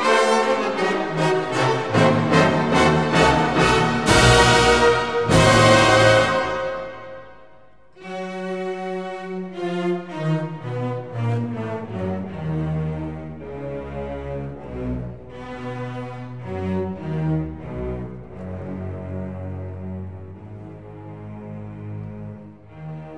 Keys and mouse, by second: 0.1-2.2 drag, 3.6 s, 3.8 x, 4.1 KP_0, 4.7 KP_Enter, 10.4 click, 11.3 click, 11.8 shift+click, 12.5 shift+click, 15.4 shift+click, 15.8 shift+click, 16.5 shift+click, 18.1 e, 18.5 right click, 19.7 s, 20.8 y, 22.5 click.